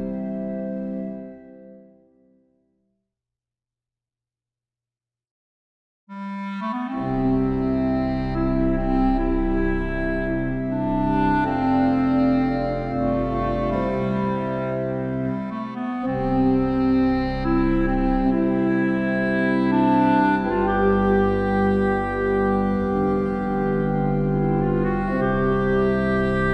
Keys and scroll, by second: 20.5 ctrl+u.